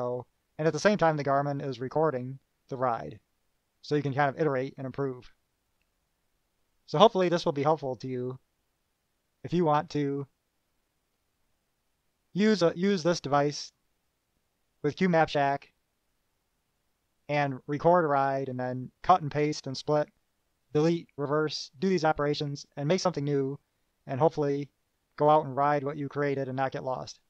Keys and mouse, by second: 9.6 click.